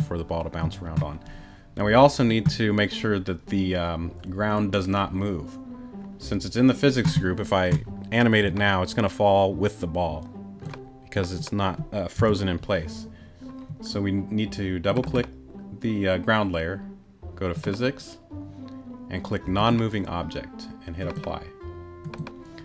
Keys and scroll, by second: 12.2 BackSpace.